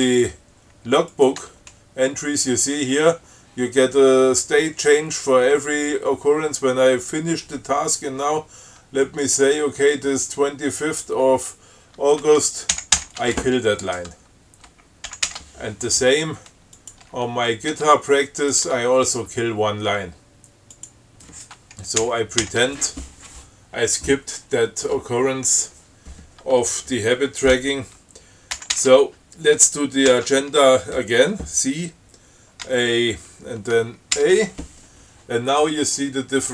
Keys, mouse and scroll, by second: 1.4 click, 1.7 Tab, 9.3 click, 11.6 Left, 13.0 ctrl+k, 15.4 ctrl+x, 15.6 ctrl+s, 17.1 click, 17.3 Tab, 18.6 Tab, 18.7 click, 18.9 Tab, 21.1 click, 22.3 ctrl+k, 28.8 ctrl+x, 29.1 ctrl+s, 30.4 ctrl+c, 32.9 a, 34.4 a.